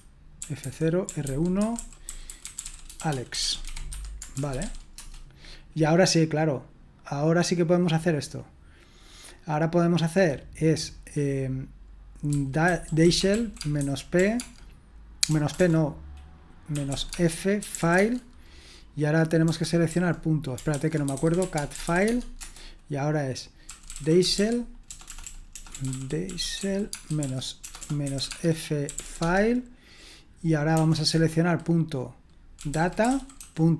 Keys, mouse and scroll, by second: 0.0-5.1 typing, 12.0-18.2 typing, 20.5-22.4 typing, 23.6-29.5 typing, 32.3-33.7 typing.